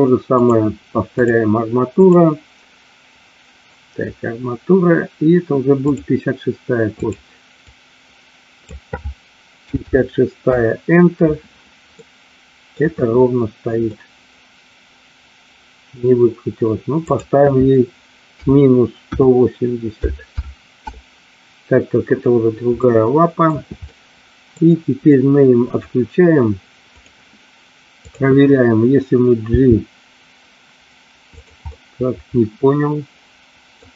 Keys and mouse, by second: 0.4-1.6 drag, 2.2-6.2 drag, 7.1-11.5 drag, 12.2 middle click, 14.1-16.0 middle drag, 17.2-21.8 drag, 22.8 middle click, 24.1 middle click, 25.7 click, 27.1 click, 28.1 click, 29.7 g, 31.8-33.9 middle drag.